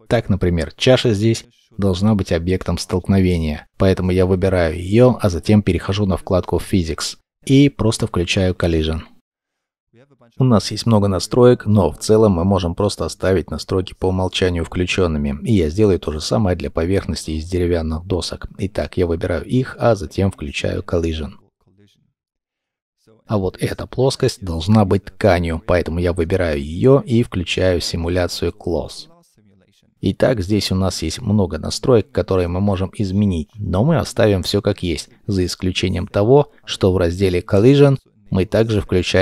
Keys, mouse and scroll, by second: 0.6 middle click, 22.6 middle click, 30.1 scroll down 1, 37.1-38.7 scroll down 1.